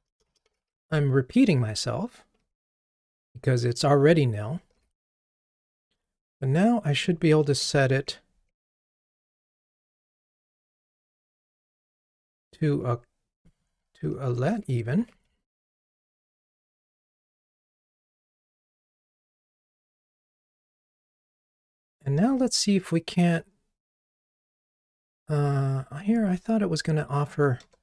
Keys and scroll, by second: 0.7 Return, 1.5 Return, 4.8 ctrl+r, 9.3 ctrl+r, 15.0 Escape, 22.3 alt+Return, 27.6 alt+Return.